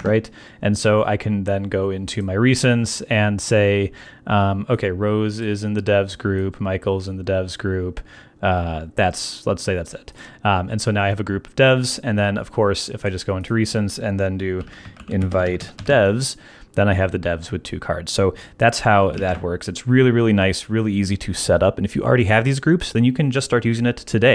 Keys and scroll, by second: 14.3-16.3 typing, 19.2 super+BackSpace, 20.2 BackSpace.